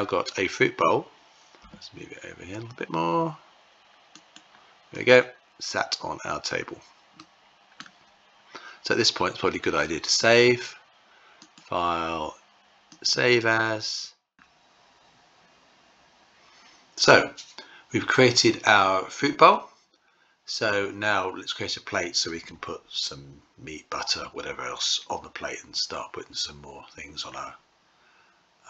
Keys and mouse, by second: 1.0 g, 4.4 click, 6.6-7.2 middle drag, 10.9-12.7 drag, 19.2 click.